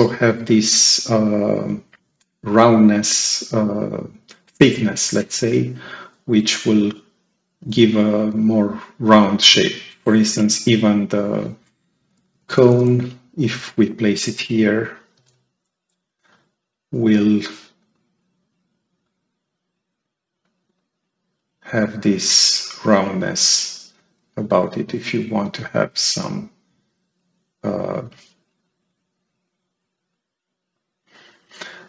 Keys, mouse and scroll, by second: 10.3 click, 11.9 [, 12.9 click, 15.1 F3, 16.2 right click, 18.9 click, 20.3-21.9 drag, 22.7 right click, 23.1-24.1 right drag, 23.3-24.1 drag, 25.7-27.9 drag.